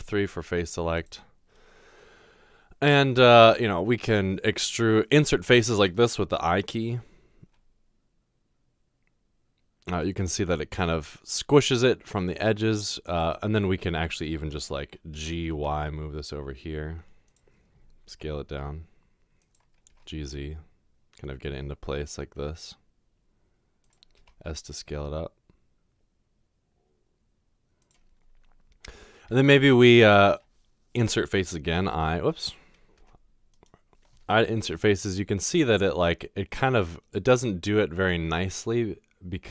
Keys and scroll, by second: 0.0 3, 3.7 typing, 7.5 typing, 15.0-15.7 typing, 18.1 typing, 19.9 typing, 24.2 typing, 31.8 typing, 33.0-34.6 typing.